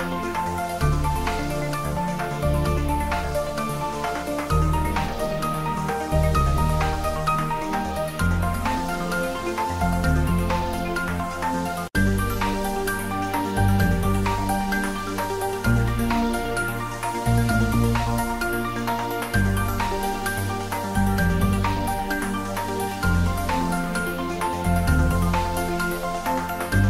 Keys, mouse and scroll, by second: 0.6 Return, 0.7 ctrl+s, 1.6 ctrl+s, 1.8-2.2 shift+middle drag, 2.4 ctrl+s, 2.6 ctrl+middle click, 3.5 click, 4.1 ctrl+s, 6.1 click, 7.7 click, 11.2 click, 12.3 ctrl+middle click, 12.4 shift+middle click, 12.9 ctrl+middle click, 13.5 ctrl+shift+middle click, 14.2 ctrl+s, 18.2 click, 19.7 click, 22.3 middle click, 23.0 ctrl+middle click, 23.8 click, 25.9 Return.